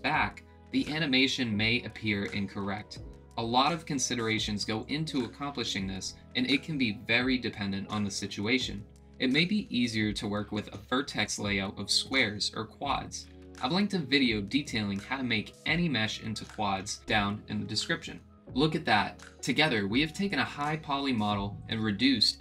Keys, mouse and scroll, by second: 1.4-3.1 middle drag, 4.0-6.8 drag, 7.5-10.7 middle drag, 11.6-12.8 drag, 12.8-14.0 middle drag, 20.7-22.4 middle drag.